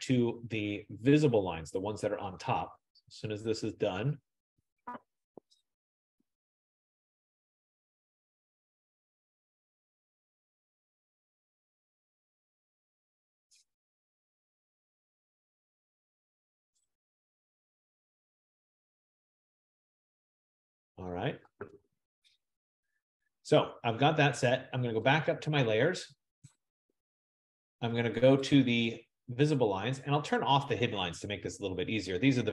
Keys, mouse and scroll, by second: 22.8-24.7 drag, 28.5 click, 30.5 click.